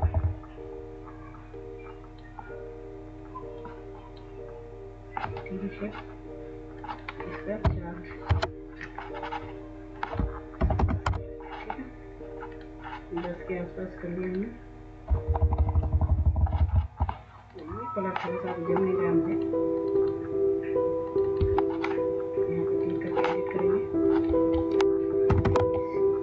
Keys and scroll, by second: 7.3 Up, 8.0 Return, 10.3 typing, 10.8 Return, 15.2-16.7 Up, 25.0 typing, 25.3 Tab.